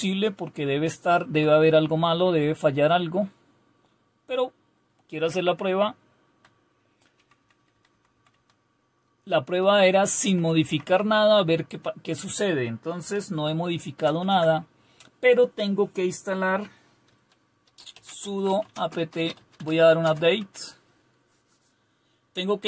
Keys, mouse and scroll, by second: 0.0-1.3 Down, 6.0-6.3 Down, 7.2 Down, 7.7 Down, 7.9 Down, 8.3 Down, 10.3 Up, 10.5 Up, 10.7 Up, 10.9 Up, 13.8 ctrl+x, 18.0-20.1 typing.